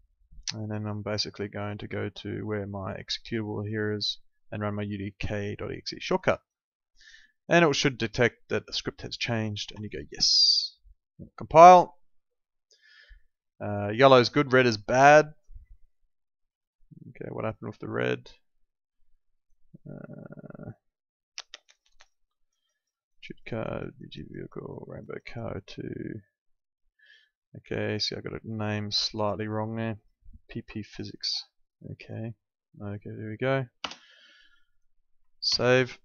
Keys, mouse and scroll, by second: 0.6 click, 17.4 click, 21.6 click, 33.8 BackSpace, 34.7 click, 35.4 ctrl+s.